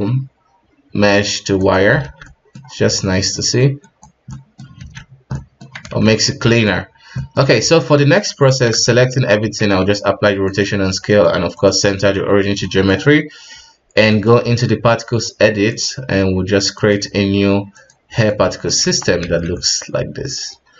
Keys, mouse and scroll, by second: 2.0 alt+a, 2.2-2.6 middle drag, 2.6-3.3 scroll up 2, 3.3-3.8 middle drag, 3.8 right click, 4.3-4.8 middle drag, 4.8 alt+a, 5.0 scroll down 3, 5.3-5.7 middle drag, 5.7-6.0 scroll up 2, 6.0 ctrl+s, 6.2-6.8 ctrl+middle drag, 6.8-7.2 scroll down 2, 7.2-7.6 middle drag, 7.6 right click, 8.8 ctrl+a, 9.4 a, 10.9 w, 12.6-14.0 middle drag, 14.0 click, 15.7-17.8 drag, 18.3-18.8 middle drag, 18.8 KP_1, 19.3 alt+a, 19.5-20.7 middle drag.